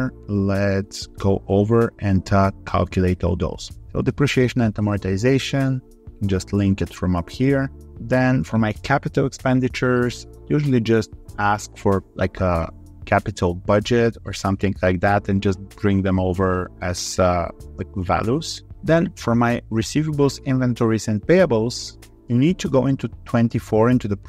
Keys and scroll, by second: 7.8 ctrl+r, 11.7 ctrl+c, 14.5 ctrl+v, 22.0 ctrl+c.